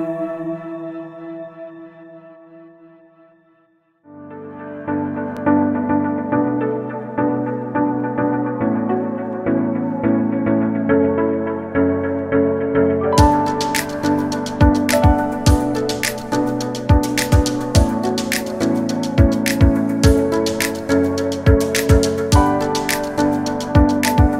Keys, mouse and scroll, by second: 0.0-0.3 scroll up 2, 0.0 shift+middle click, 0.3 shift+middle click, 0.6 g, 1.7 click, 1.9-2.9 scroll up 6, 2.0 shift+middle click, 2.9 click, 3.7 Delete, 4.5 click, 4.6-5.2 scroll down 7, 5.0 l, 5.3 scroll up 1, 5.6 click, 7.1 click, 7.2-7.7 scroll up 1, 7.7 l, 7.9 scroll down 1, 8.1 shift+middle click, 8.2 g, 8.9-9.2 scroll down 3, 9.0 middle click, 9.2 middle click, 9.3 scroll up 2, 9.4 shift+middle click, 9.9 g, 10.5 middle click, 10.8 KP_3, 11.0-11.7 scroll up 8, 11.1 shift+middle click, 11.7 click, 11.9 g, 13.5 t, 14.1 r, 15.4 click, 15.5 scroll down 2, 15.5 middle click, 15.7 Tab, 15.8 scroll up 2, 16.3 l, 16.5 scroll up 1, 16.6 s, 17.2 middle click, 17.4 click, 17.5 shift+a, 17.6 shift+s, 18.3 scroll up 1, 18.3 middle click, 18.4 scroll down 1, 18.5 middle click, 18.6 scroll up 3, 18.8 Tab, 19.2 l, 19.3 middle click, 19.5 scroll up 2, 19.6 s, 20.2 scroll down 2, 20.4 Tab, 20.5 middle click, 21.4 Tab, 21.7 KP_3, 22.0-22.6 scroll up 3, 22.2 shift+middle click, 22.6 shift+middle click, 23.0 shift+d, 24.2 shift+middle click.